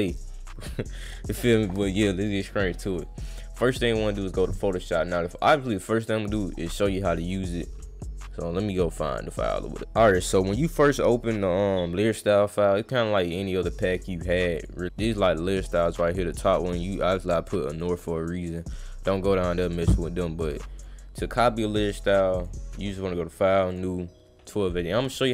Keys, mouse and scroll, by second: 0.1 click, 2.9 click, 3.8 click, 4.8 click, 5.3 click, 10.3 click, 13.3 click, 13.7 click, 14.3 click, 14.5 click, 15.7 click, 17.7 click, 18.0 click, 18.5 click, 20.5 click, 20.7 click, 21.1 click, 22.3 click, 22.8 click, 23.7 click, 24.5 click.